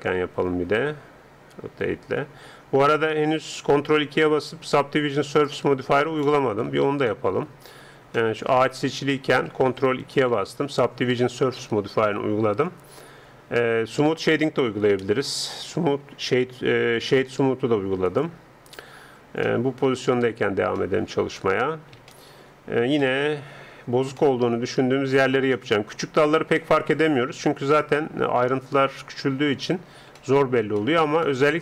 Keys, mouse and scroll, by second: 1.5 r, 6.3 middle click, 6.8 Tab, 8.8-10.9 right drag, 10.1 ctrl+2, 15.1 space, 19.0-20.2 middle drag, 20.2 Tab, 23.7-31.6 middle drag.